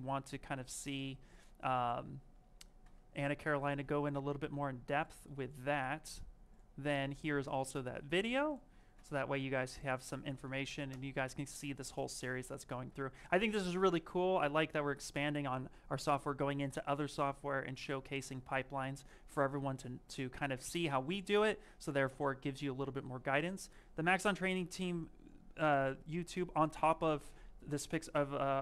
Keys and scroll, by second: 1.5 alt+Tab, 10.7 Return.